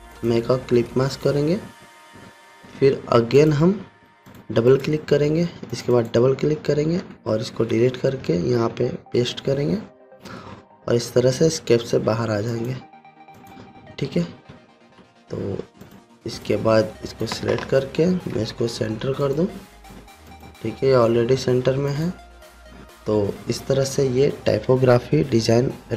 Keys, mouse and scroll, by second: 0.6 click, 8.3 Delete, 9.3 ctrl+f, 11.9 Escape, 13.0 click, 15.2 alt+scroll down 1, 16.4-17.9 drag, 18.9 ctrl+g, 19.7 click.